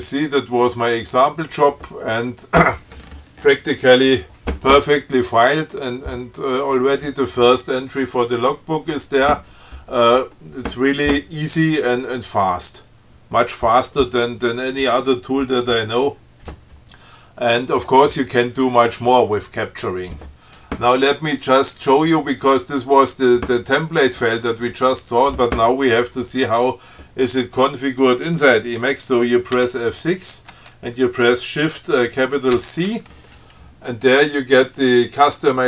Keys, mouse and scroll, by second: 29.8 F6, 32.8 shift+c.